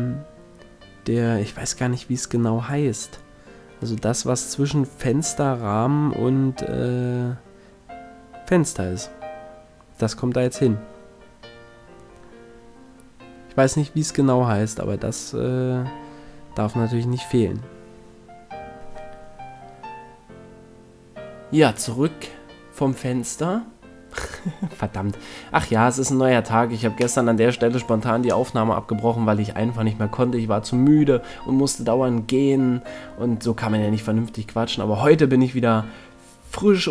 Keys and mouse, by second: 5.1 s, 11.9-17.7 middle drag, 17.7 click, 20.1 middle click, 22.7 a, 27.3-28.6 middle drag, 28.6 z, 29.5 click, 29.7 click, 31.8 ctrl+l, 35.6 shift+d.